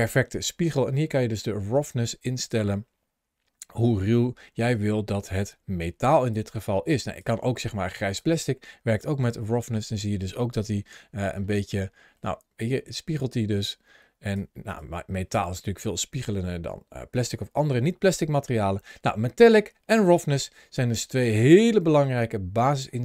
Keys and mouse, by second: 6.8 click, 8.0-8.9 drag, 9.3-10.4 middle drag, 11.4 middle click, 13.0-14.2 drag, 14.6-19.3 drag, 19.8-22.6 drag.